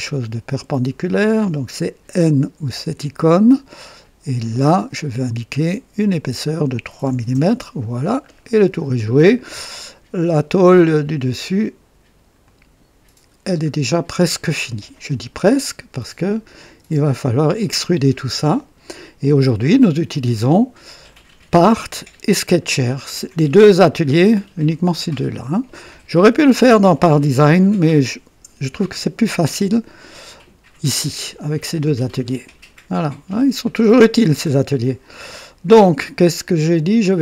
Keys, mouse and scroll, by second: 0.4 click, 0.7-1.5 typing, 2.6 typing, 4.3 click, 5.9 click, 7.2 typing, 7.2 KP_Enter, 8.2-8.6 scroll down 2, 8.9-9.8 right drag, 12.3 click, 13.3 scroll down 2, 13.9-15.0 drag, 16.2 click, 16.7 typing, 17.5-18.4 drag, 19.7 click.